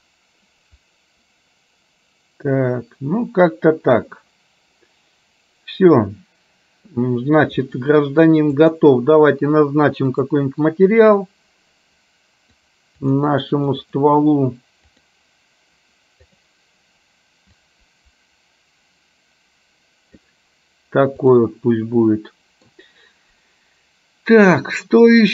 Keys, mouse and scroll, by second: 8.8 click, 13.0-14.3 drag, 15.0 click, 16.4 click, 21.3 click, 22.1 middle click.